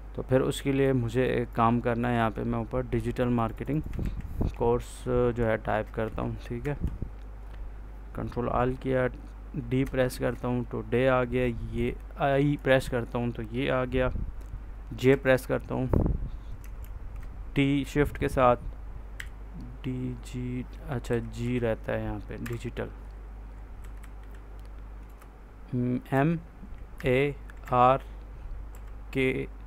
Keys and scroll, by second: 3.9 ctrl+a, 6.5 Escape, 10.0 shift+d, 12.4 i, 14.9 j, 16.7 shift+t, 19.0 l, 21.0 Left, 22.3 i, 23.7 Right, 24.9 space, 26.0 m, 26.9 a, 27.5 r, 28.6 k.